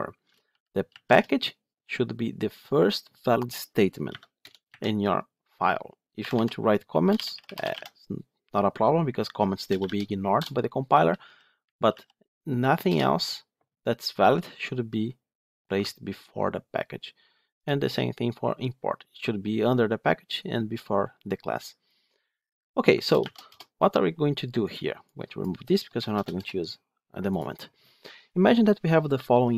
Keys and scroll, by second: 0.4 ctrl+shift+Down.